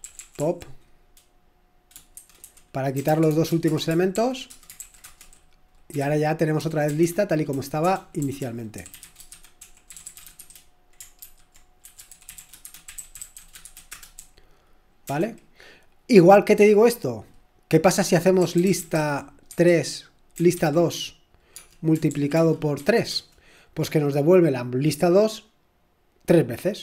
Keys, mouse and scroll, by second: 0.0-0.9 typing, 1.9-7.4 typing, 8.7-15.5 typing, 18.3-22.8 typing, 23.1 Return.